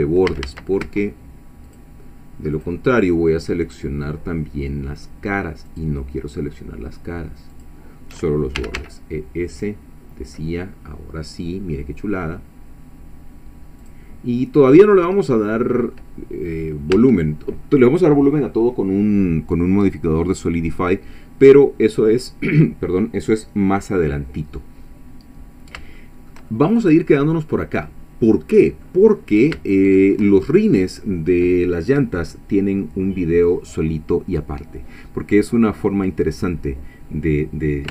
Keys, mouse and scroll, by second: 0.3 a, 0.8 alt+a, 1.7 alt+shift+click, 2.6 alt+shift+click, 5.7 alt+shift+click, 7.5 alt+shift+click, 8.6 e, 8.8 s, 13.8 click, 14.3-14.6 scroll down 2, 14.7-16.1 middle drag, 16.3-16.6 scroll down 2, 17.0 Tab, 25.5-25.8 scroll down 2, 26.0-29.0 shift+middle drag, 29.1-29.5 scroll up 2, 29.8 shift+middle click.